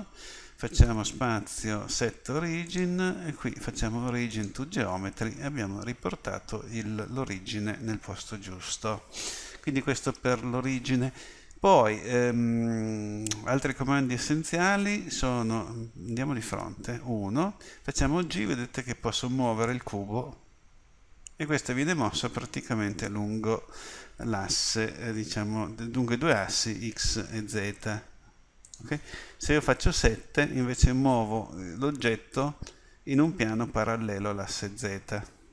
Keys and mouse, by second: 0.8 space, 5.3 middle click, 16.4 KP_1, 17.7 g, 29.8 KP_7, 31.1 g.